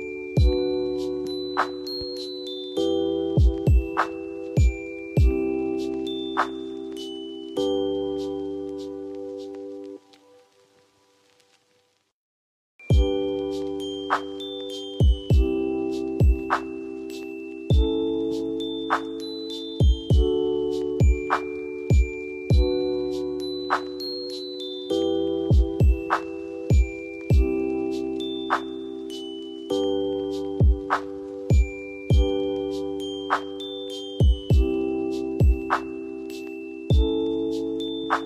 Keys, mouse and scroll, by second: 6.5 right click, 7.0 F2, 7.6-8.9 drag, 10.8 F4, 12.2 click, 17.8-25.2 drag, 25.2-36.6 drag, 36.6 F2, 36.9-38.2 drag.